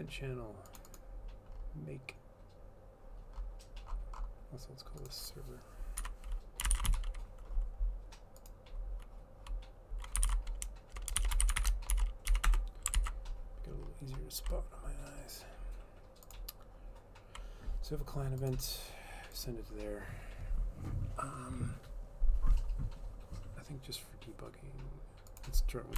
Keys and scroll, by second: 6.1 F2, 6.5-7.5 typing, 10.0-13.1 typing, 13.1 ctrl+s.